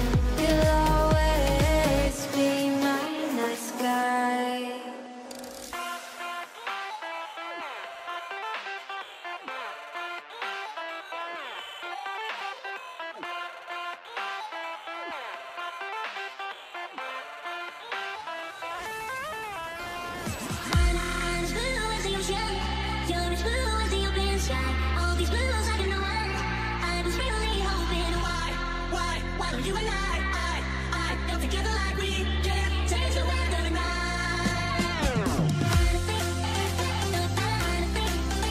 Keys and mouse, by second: 3.1 alt+a, 3.9 shift+middle click, 7.8-10.0 shift+middle drag, 10.5 shift+middle click, 11.2 Tab, 11.7 alt+a, 12.0 shift+middle click, 12.6 ctrl+s, 13.6 click, 13.9 Tab, 14.5 alt+a, 15.3 click, 16.9 shift+d, 18.3 shift+middle click, 19.0 g, 20.1-24.9 typing, 26.4 e, 27.1 e, 27.9 e, 30.0 f, 31.2 alt+a, 32.9 ctrl+right click, 33.9 f, 34.1 alt+a, 36.0 k.